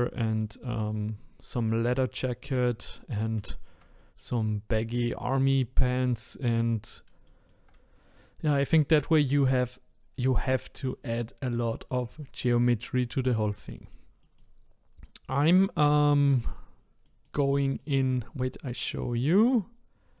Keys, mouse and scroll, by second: 1.2-1.7 scroll up 2, 1.7 middle click, 2.3-2.6 scroll down 1, 2.6-6.2 middle drag, 6.2-6.6 scroll down 2, 6.6-7.2 scroll up 1, 7.2-10.4 shift+middle drag, 11.7-15.8 middle drag, 15.8 click, 16.4 click, 17.0-20.2 middle drag.